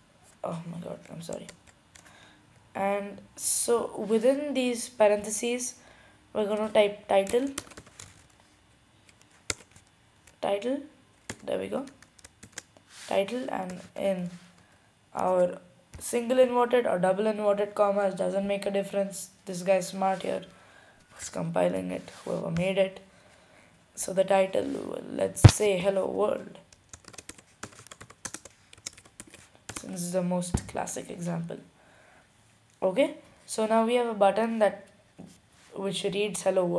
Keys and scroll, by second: 7.1-8.4 typing, 9.7 typing, 11.5-12.3 typing, 27.1-28.4 typing, 29.6-30.4 typing.